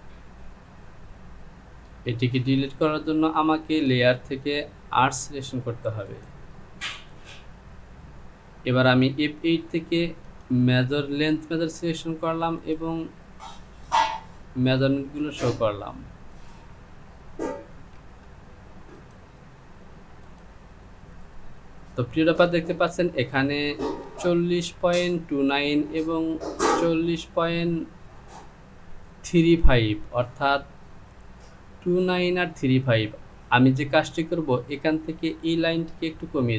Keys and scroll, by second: 17.8 ctrl+z.